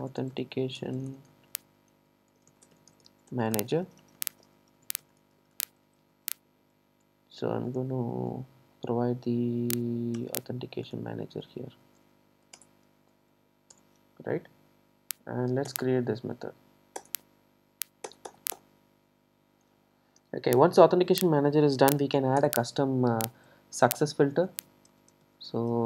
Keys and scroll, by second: 12.6 Return.